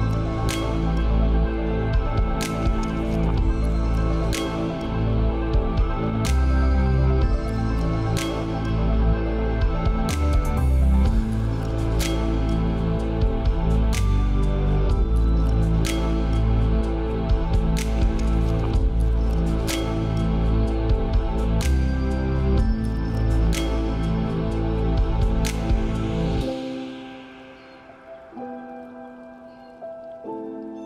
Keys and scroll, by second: 25.5 ctrl+a.